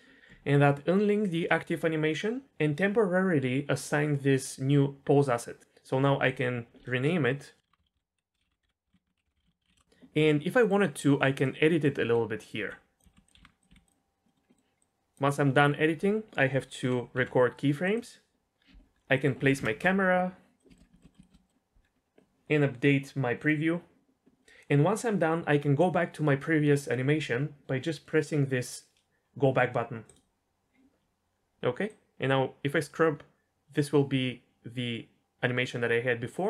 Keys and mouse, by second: 6.4-9.7 drag, 7.8 l, 9.6 BackSpace, 10.6 middle drag, 11.7-12.1 middle drag, 12.1-13.6 typing, 13.8 click, 14.3 middle click, 14.5 middle drag, 14.8 click, 17.1 i, 19.2 middle click, 19.6 ctrl+alt+KP_0, 20.6 click, 22.1-23.5 drag, 31.9-36.3 drag.